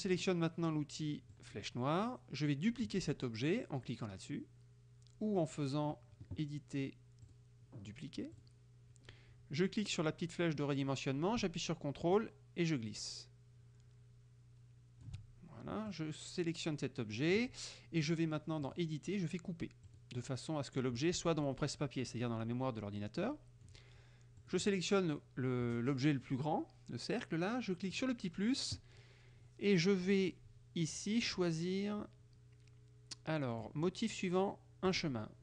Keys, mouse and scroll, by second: 1.5 click, 7.3 click, 8.4 click, 12.2-15.3 ctrl+drag, 16.0-17.6 drag, 18.7 click, 19.9 click, 23.3 click, 24.5 click, 28.0 click, 31.4-33.9 drag, 35.0 click.